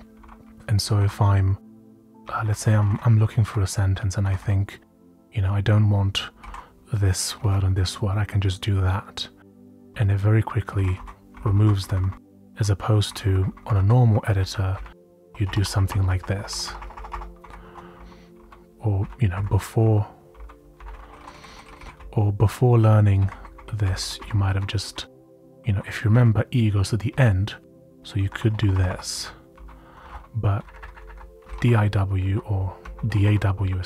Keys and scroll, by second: 0.0-4.3 typing, 6.1-7.9 typing, 9.5-11.9 typing, 13.8-16.0 typing, 14.2 Right, 14.6 Left, 17.4 Right, 17.6 Escape, 17.9 u, 18.3 u, 19.0 Up, 19.3 Down, 19.8-21.7 typing, 20.7 Up, 20.9 Up, 21.9 Up, 22.4 Up, 22.5 Up, 22.6 Up, 22.7 Up, 22.8 Up, 23.7 Down, 24.0 Up, 24.5 Down, 24.5-30.1 typing, 30.0 ctrl+r, 30.6 Left, 30.7 Left, 30.9 Left, 31.0 Left, 31.2-33.8 typing.